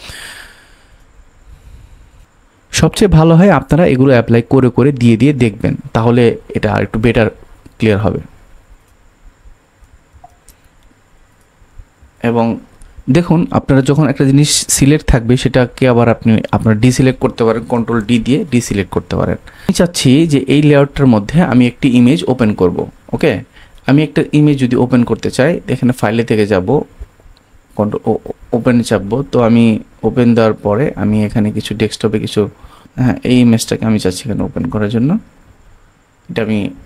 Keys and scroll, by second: 10.0 super+z, 11.8 super+z, 17.9 super+d.